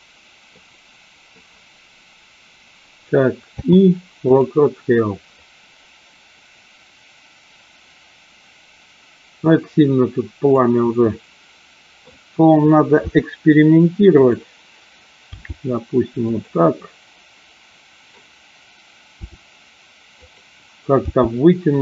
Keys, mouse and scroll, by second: 3.5 i, 5.5-10.6 drag, 11.2-12.3 middle drag, 13.0 r, 14.3 click, 15.4 g, 16.4 click, 16.9-18.4 middle drag, 19.3 r, 21.1 g.